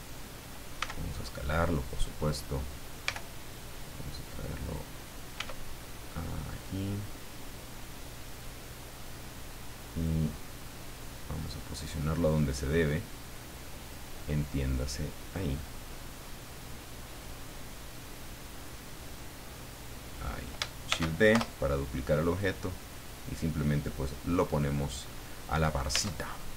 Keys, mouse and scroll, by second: 0.8 s, 1.8 click, 3.0 g, 4.6 click, 5.3 s, 8.2 click, 9.0-10.2 drag, 10.3-10.6 scroll up 1, 10.6-11.7 middle drag, 12.7-14.1 drag, 14.7 click, 15.5-16.8 middle drag, 17.0-17.3 scroll up 1, 18.4-20.3 drag, 20.9 shift+d, 21.3 shift+Return, 22.4-25.1 drag, 25.2-25.5 scroll down 2, 25.9 Tab, 26.4-26.5 scroll down 2.